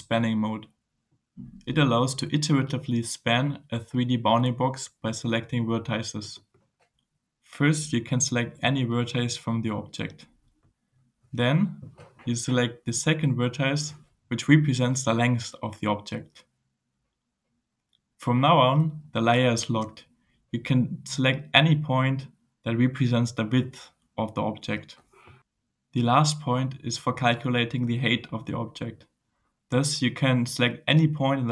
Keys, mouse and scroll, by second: 0.0 scroll down 1, 0.5-1.7 drag, 2.1 click, 6.2 click, 13.8 click, 19.2 click, 28.7 click.